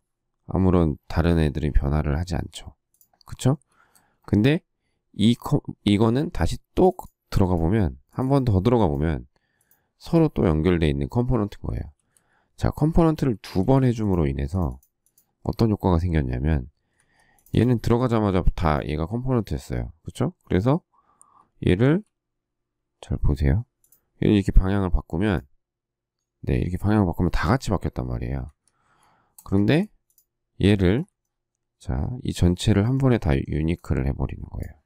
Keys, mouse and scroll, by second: 3.9 space, 11.7 ctrl+z, 16.9 Escape, 21.8 q, 28.5 Escape, 29.3 space, 29.4 space, 29.5 Escape.